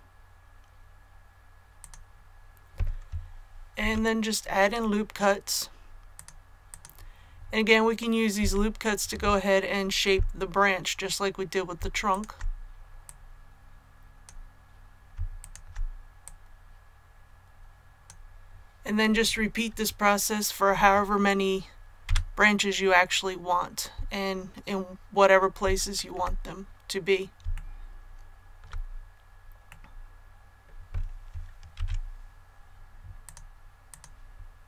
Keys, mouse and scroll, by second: 1.7 click, 3.7 ctrl+r, 4.5-5.5 scroll up 1, 6.1 click, 8.3 a, 12.0 alt+right click, 13.0-15.1 drag, 15.3 alt+right click, 16.1-18.1 drag, 22.0 a, 25.9 shift+middle click, 27.5 shift+middle click, 29.6-31.1 middle drag, 31.7 ctrl+r, 32.5-33.1 scroll up 1, 33.1 click.